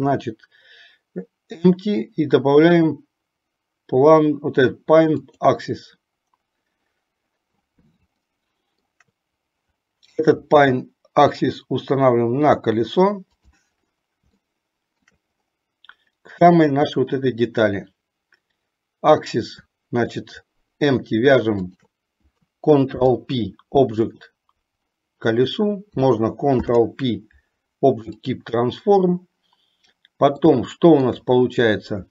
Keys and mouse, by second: 8.3-9.2 shift+middle drag, 10.7 g, 14.7 shift+middle click, 22.9 ctrl+p, 26.6 ctrl+p, 30.8 shift+middle click.